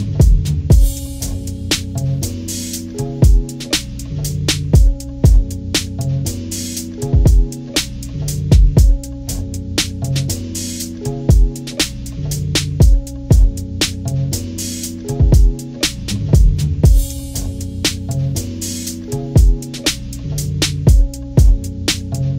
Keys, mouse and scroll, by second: 1.4 ctrl+-, 1.6 ctrl+=, 1.6 ctrl+scroll down 2, 1.9 click, 2.6 click, 3.3 click, 3.6 ctrl+-, 4.0 ctrl+=, 4.0 ctrl+scroll up 2, 4.2-5.4 drag, 5.4 ctrl+-, 5.6 ctrl+=, 5.8 ctrl+-, 6.0 ctrl+=, 6.3 click, 7.3 click, 7.5 ctrl+-, 7.7-8.1 scroll down 3, 7.9 ctrl+=, 8.1-9.2 drag, 9.3 click, 9.7-10.8 drag, 11.0-12.4 drag, 12.6 click, 12.8 ctrl+-, 13.0 ctrl+=, 13.2 click, 13.8 ctrl+-, 14.0 scroll down 2, 14.1 click, 14.5 click, 15.1 click, 15.7 ctrl+-, 15.9 ctrl+=, 15.9 ctrl+scroll up 1, 16.5 scroll down 2, 16.6-18.4 drag, 18.5 click, 19.1 click, 19.8 ctrl+-, 20.0 ctrl+=, 20.2 click, 21.2 click, 21.6 click, 22.2 click.